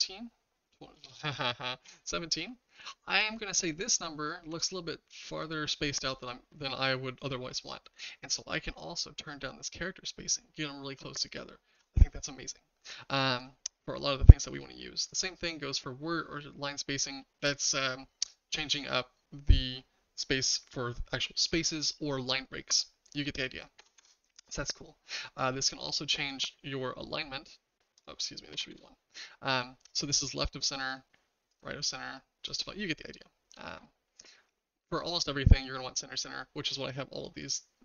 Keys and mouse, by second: 0.9-1.8 typing, 4.4 Tab, 9.1-11.8 shift+drag, 13.4-24.6 drag, 25.5-26.5 drag, 28.1-29.2 drag, 30.9-31.6 drag, 32.4-33.8 drag.